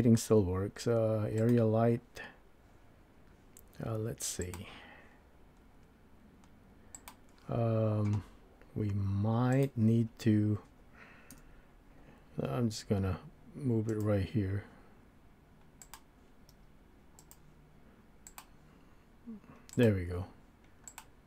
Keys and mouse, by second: 9.6 click, 11.3 KP_1, 12.8 g, 13.9 click, 15.9 click, 16.5 g, 17.2 click, 18.2-20.3 drag, 20.9 click.